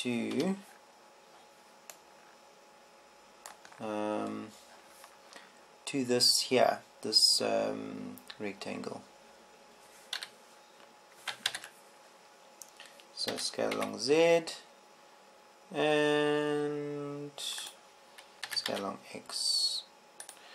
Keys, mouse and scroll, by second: 11.7 KP_1, 13.0 ctrl+KP_1, 14.9 s, 19.3-20.5 drag, 20.2 s.